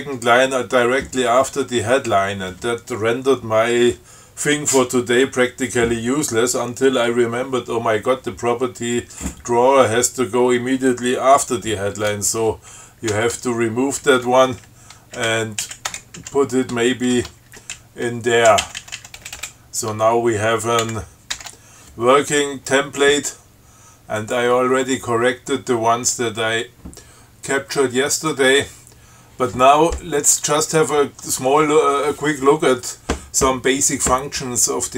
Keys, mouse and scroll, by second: 13.3 ctrl+w, 14.4 Delete, 14.9 Down, 16.1 Return, 16.4 Up, 17.4 ctrl+y, 17.7 ctrl+Down, 18.0 ctrl+Left, 19.4 space, 21.1 ctrl+x, 21.6 ctrl+s, 24.4 click, 28.4 click.